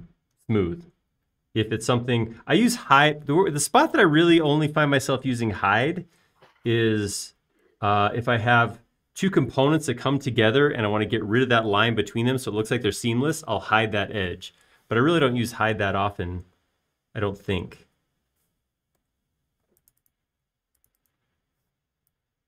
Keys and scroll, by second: 20.7 f, 21.2 space, 22.0 f.